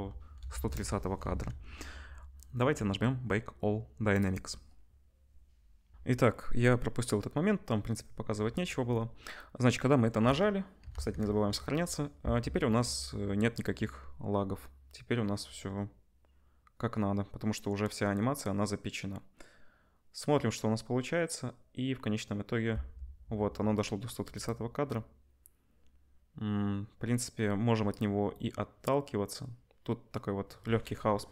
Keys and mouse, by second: 1.3 ctrl+s, 5.9 ctrl+shift+F1, 10.9 ctrl+s, 10.9 ctrl+drag, 12.7 space, 22.7 space, 31.2 KP_0.